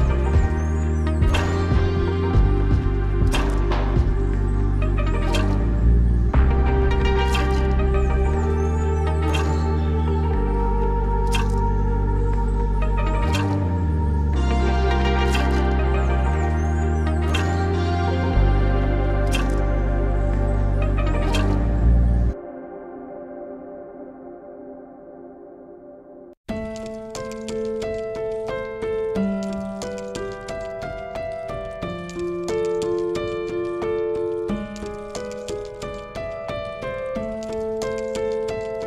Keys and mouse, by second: 0.8-1.3 drag, 2.0 click, 3.2 click, 3.6-4.4 middle drag, 5.4 middle click, 6.9-9.1 drag, 9.1-9.4 middle drag, 10.2 click, 10.5-11.3 shift+drag, 12.5 click, 14.4 shift+drag, 15.4 ctrl+click, 17.6 ctrl+click, 18.8 shift+click, 19.2 shift+drag, 20.4 shift+drag, 21.9 ctrl+drag, 23.0 click, 24.6 shift+click, 25.0 middle click, 25.8 shift+click, 26.9 shift+drag, 27.6 shift+drag, 28.3 shift+click, 29.1 shift+click, 32.1 shift+drag, 33.2-33.5 shift+drag, 33.7-34.1 middle drag, 34.8-35.3 shift+drag, 36.0-36.6 shift+drag, 37.5-38.1 shift+drag.